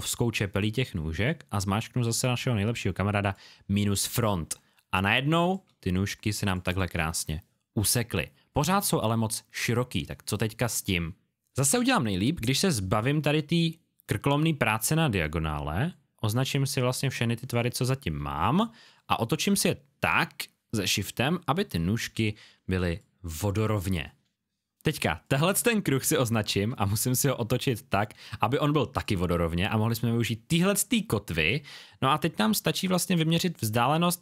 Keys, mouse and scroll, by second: 3.2 click, 4.4 space, 4.6 click, 15.9 click, 18.9 shift+click, 22.9 click, 26.8 shift+click, 33.2 alt+scroll up 1.